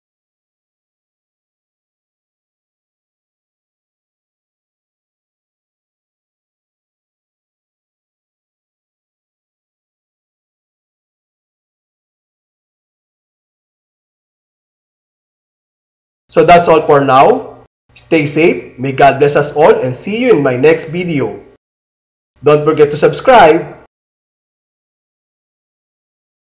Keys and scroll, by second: 2.0 Return.